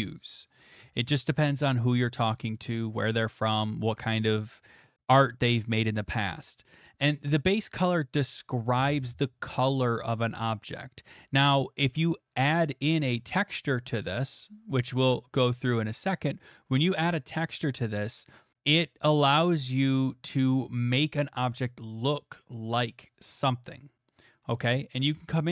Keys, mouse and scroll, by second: 7.1-14.0 drag, 24.6-25.5 drag.